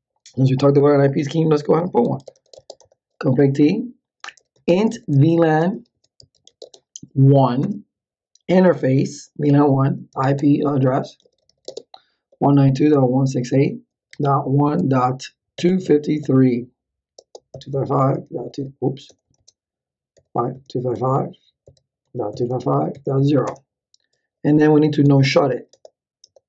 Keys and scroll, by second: 1.8-7.3 typing, 7.6 Return, 9.7-26.0 typing.